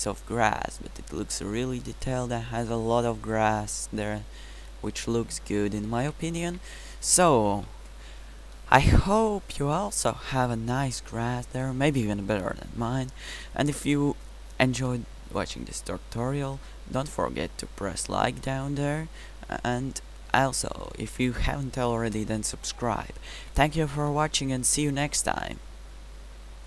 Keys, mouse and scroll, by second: 1.1 middle click, 1.5-3.2 middle drag, 3.8-4.5 middle drag, 4.5 click, 4.7 middle click, 4.8 click, 6.0-7.5 middle drag, 7.5 KP_Decimal, 8.8-10.3 middle drag, 13.2-14.5 middle drag, 14.9 middle drag, 20.2-21.3 middle drag, 22.0 middle drag, 22.5-25.0 middle drag.